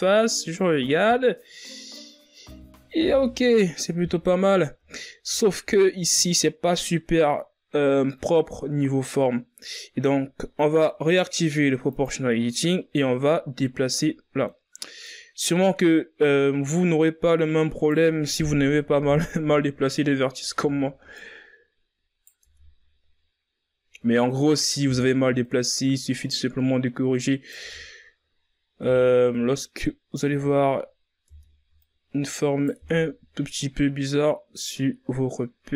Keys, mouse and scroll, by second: 0.7-2.0 scroll up 6, 2.0-2.5 scroll down 2, 2.5-3.8 ctrl+scroll up 5, 3.8 Tab, 4.8-8.0 ctrl+scroll up 2, 8.4-9.2 scroll down 3, 9.2 scroll up 2, 11.7 click, 12.8-14.9 middle drag, 14.9 right click, 18.2 KP_1, 18.9 Tab, 19.4-20.0 scroll down 2, 20.0-20.4 scroll up 3, 20.4 Tab, 21.0 right click, 22.3 Tab, 22.9-23.9 scroll down 4, 23.9-24.7 scroll up 1, 24.7 Tab, 25.3 right click, 27.5 Tab, 27.9-28.3 scroll down 3, 28.3-28.7 scroll up 2, 28.7 Tab, 29.1 right click, 30.1 Tab, 31.1 Tab, 31.6 right click, 32.6 Tab, 33.3-34.2 scroll down 4, 34.2-35.3 scroll up 5, 35.3-35.7 scroll down 3.